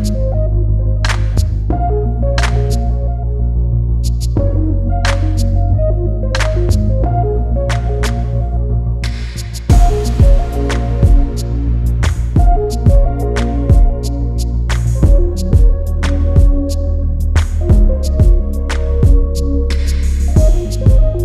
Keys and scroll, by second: 15.9 space, 16.9 space, 18.1 space.